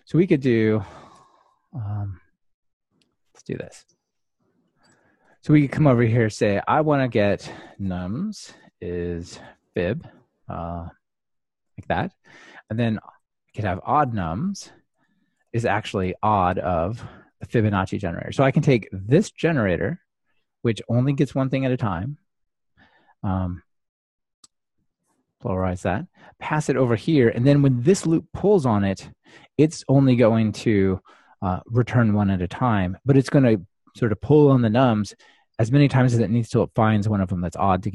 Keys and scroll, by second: 18.1 Escape.